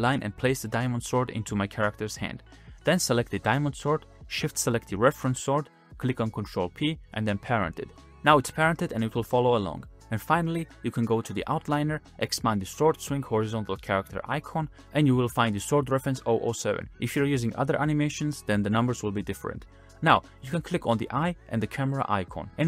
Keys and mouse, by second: 0.0 click, 0.0-3.7 typing, 0.9 drag, 2.4 click, 3.0 drag, 3.5 click, 4.3 drag, 4.8 shift+click, 5.2 click, 5.9 ctrl+p, 7.5 click, 7.7 space, 8.8 space, 9.1 click, 9.4 click, 10.5 click, 11.2 click, 13.8 click, 19.5 click, 22.4-22.6 middle drag.